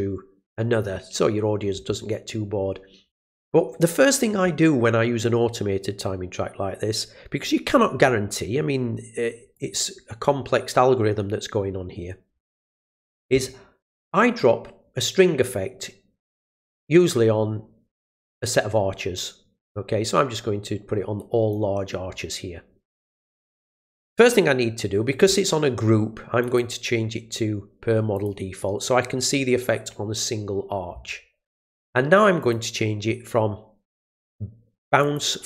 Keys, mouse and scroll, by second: 9.5 click, 14.4-21.5 drag, 26.4 click, 28.1 click, 32.4 click, 35.0 click.